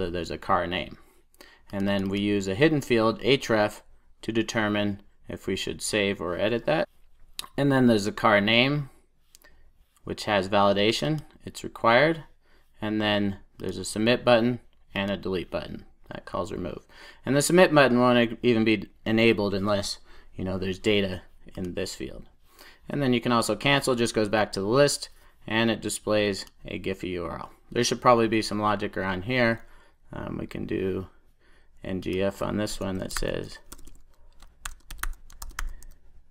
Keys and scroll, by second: 6.8 super+e.